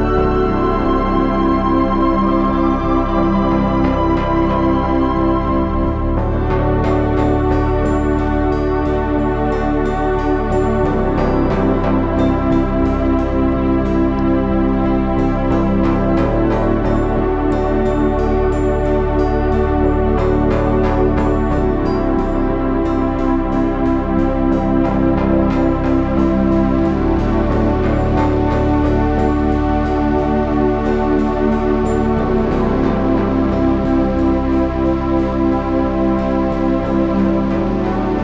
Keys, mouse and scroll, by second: 0.0 Tab, 0.3 z, 3.0 KP_1, 4.7 Tab, 8.5 ctrl+z, 10.2 KP_3, 10.4 z, 11.4 c, 14.1 KP_7, 15.6 KP_1, 18.0 click, 21.2 KP_1, 31.6 ctrl+z, 32.3 KP_3, 33.5 z, 33.6 c, 34.7 ctrl+z, 36.1 c.